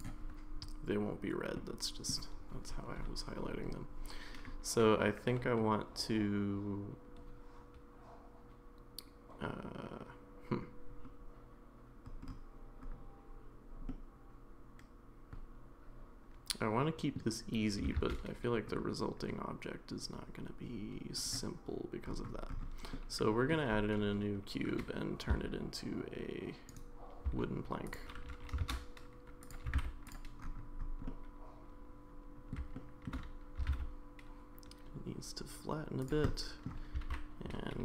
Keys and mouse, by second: 1.5 middle click, 14.0-17.1 middle drag, 18.0 shift+a, 22.9 middle click, 25.3 s, 27.3 s, 28.3 g, 29.7 g, 31.1-32.5 middle drag, 32.7 shift+middle click, 33.6 s, 36.3 middle click, 36.9 s.